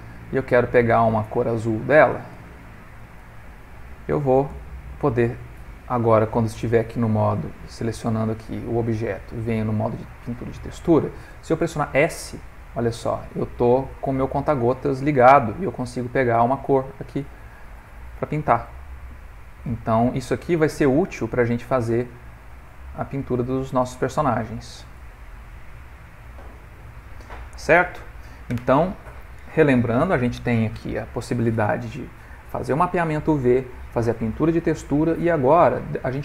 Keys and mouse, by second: 2.3 g, 3.3 ctrl+middle click, 4.1 shift+middle click, 4.6 ctrl+middle click, 6.4 click, 7.5 click, 8.3 click, 12.1 s, 17.2 click, 19.2 s, 20.1 click, 22.9 s, 23.9 click, 25.0 s, 25.9 click, 27.5 ctrl+middle click, 28.0 shift+middle click.